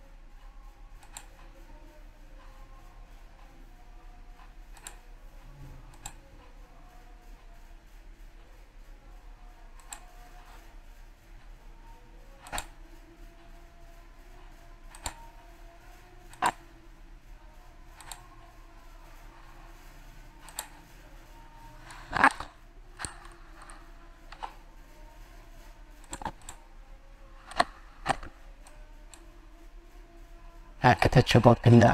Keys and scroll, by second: 1.7 ctrl+z.